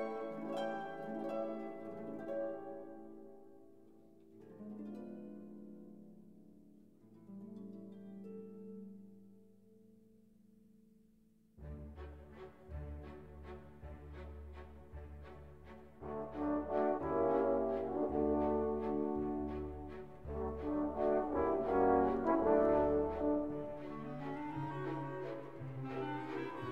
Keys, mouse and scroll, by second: 2.3 click, 3.5 click, 4.6 scroll down 1, 7.2 click, 8.9 click, 10.4 click, 11.8-12.7 typing, 14.8 -, 17.6 x, 18.0 0, 21.2 shift+space, 21.7 3, 22.1 /, 22.7 3, 24.1 shift+=, 25.3 x, 26.0 0.